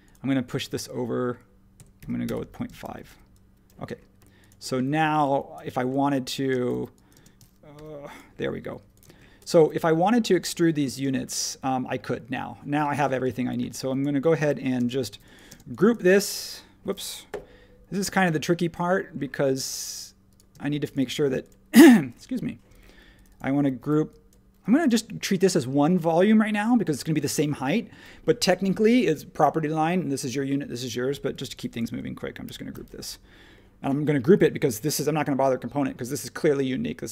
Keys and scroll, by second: 1.5-4.8 typing, 6.5-7.7 typing, 9.0 space, 11.0 space, 12.9 space, 13.6 e, 14.5 super+z, 15.0-15.6 typing, 17.3 l, 20.5 space, 23.8 e, 24.6 space, 32.4 super+g.